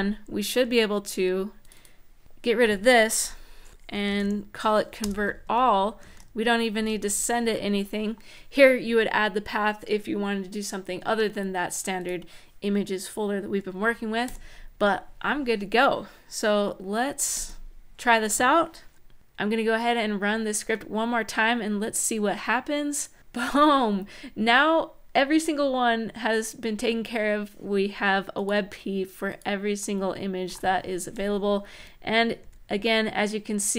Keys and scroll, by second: 3.4-4.4 typing, 4.8 Return, 5.2 Right, 5.8 shift+super+Right, 6.5 shift+Left, 6.9 BackSpace, 14.0 super+s, 17.1 ctrl+`, 31.5 Up, 32.2 Down.